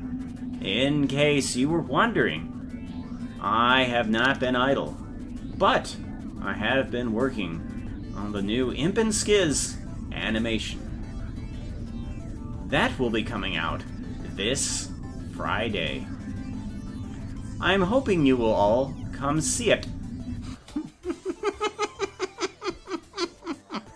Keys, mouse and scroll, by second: 20.5 space.